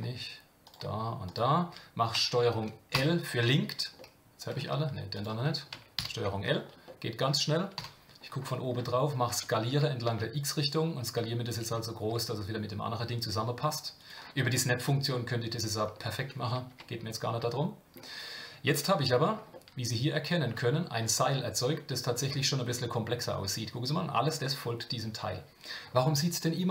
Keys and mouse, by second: 2.9 ctrl+l, 4.0 middle click, 5.1 click, 6.0 ctrl+l, 6.9 middle click, 7.7 KP_7, 9.3 s, 16.7 Tab, 17.5 middle click, 19.5-20.4 shift+middle drag, 21.2-22.2 shift+middle drag.